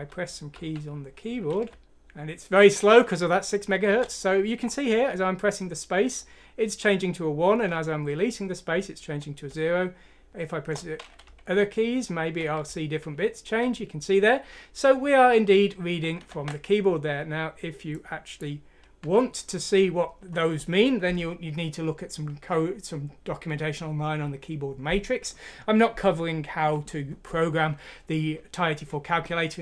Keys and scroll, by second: 0.1-4.0 typing, 6.1 typing, 7.8 typing, 9.4 Return, 9.9 Return, 9.9 typing, 10.0 Return, 10.5 Return, 11.3-14.4 typing.